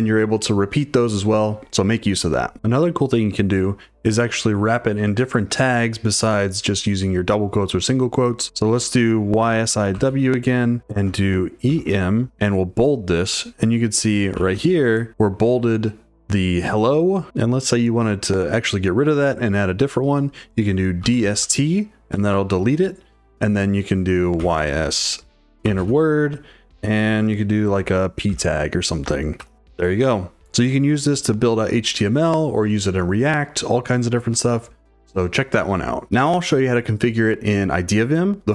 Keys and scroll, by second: 0.0-0.2 typing, 9.2-12.8 typing, 14.3 v, 14.6 shift+w, 20.7-21.9 typing, 24.1-26.1 typing, 27.8-29.4 typing.